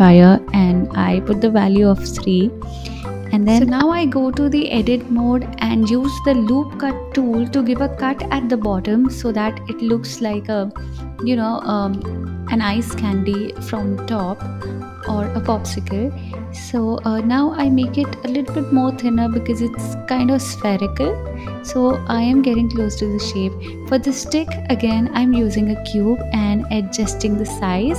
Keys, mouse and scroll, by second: 2.1-3.6 right drag, 3.6-5.5 drag, 5.5 ctrl+r, 11.7 click, 12.9 g, 15.3-17.0 drag, 17.0 KP_7, 18.6-19.7 drag, 21.6 KP_1, 22.3 click, 23.9 shift+a, 25.5 s, 26.9 click.